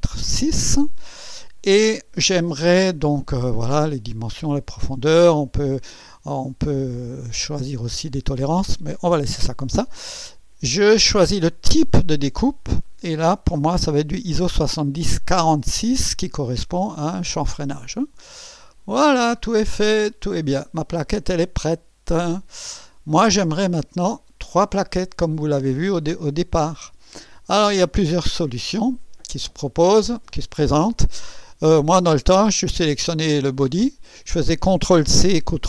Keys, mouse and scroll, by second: 0.3 click, 12.6 click, 15.5 click, 18.7 click, 19.5 scroll down 1, 20.1-22.7 drag, 23.8-24.3 scroll down 1, 24.7 right click, 26.9-27.4 scroll up 1, 27.4 right click, 33.8 click.